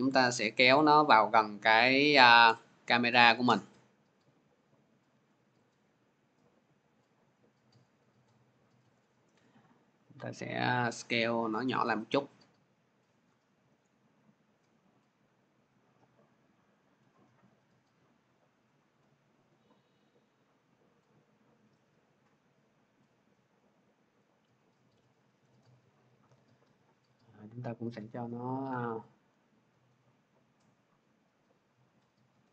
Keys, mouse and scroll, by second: 1.2 scroll, 3.9 middle click, 7.6 click, 8.3 scroll, 9.3 scroll, 12.9 shift+click, 17.6 click, 18.2-21.2 shift+drag, 24.0 click, 24.5 scroll, 25.4 middle click, 26.8 click, 27.3 click, 29.0 scroll, 30.9-32.3 drag.